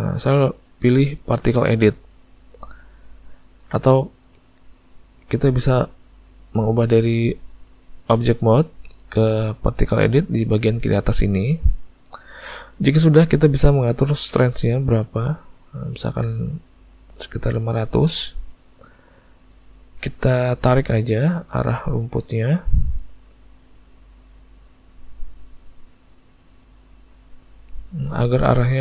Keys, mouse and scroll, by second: 6.7 click, 9.2 click, 14.8 click, 19.3 middle click, 20.5 click, 21.2 click, 21.8 click, 22.3 click, 22.4 click, 22.7 click, 23.1 click, 23.5 click, 24.2 click, 24.5 click, 24.9 click, 25.4 click, 25.7 click, 26.0 click, 26.4 click, 26.8 click, 27.3 click, 28.7 click.